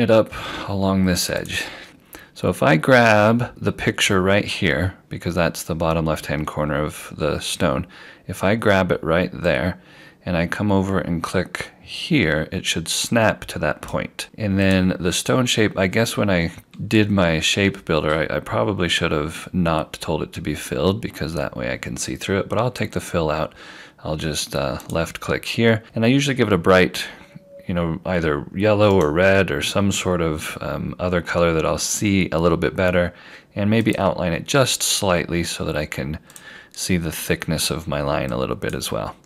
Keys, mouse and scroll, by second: 1.4 click, 1.9-2.9 scroll down 1, 2.9 scroll up 1, 6.6-8.4 scroll down 1, 9.5 scroll down 1, 9.5 click, 24.9 click, 29.0 right click, 33.9 click.